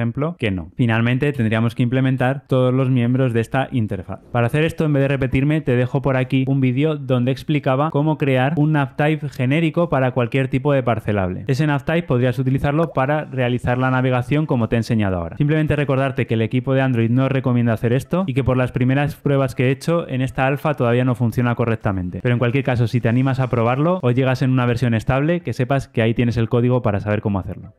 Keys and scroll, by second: 0.3 Return.